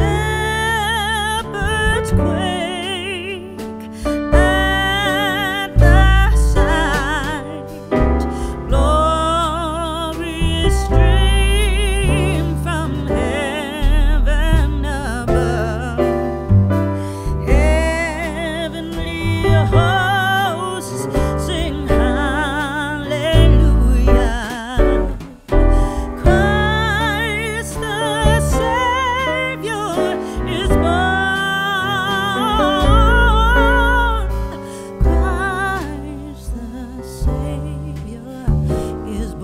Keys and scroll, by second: 3.8 n, 4.4 t, 6.5 n, 8.0 n, 9.0 a, 9.8 shift+a, 10.7 Escape, 12.2 shift+d, 17.5 a, 19.4 Return, 29.4 shift+z, 38.6 1, 38.8 Return.